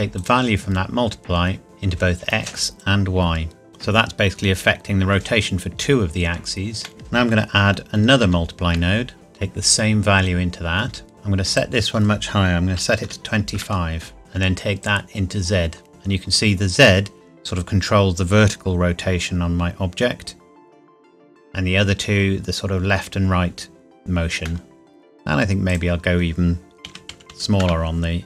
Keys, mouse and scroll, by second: 0.5 click, 6.8 middle click, 6.9 click, 8.2 shift+d, 9.1 click, 11.5 click, 12.7 KP_2, 13.1 KP_5, 13.5 KP_Enter, 14.8 click, 24.4 middle click, 25.7 click, 25.8 click, 26.8 KP_1, 27.1 KP_Decimal, 27.3 KP_5, 27.6 KP_Enter.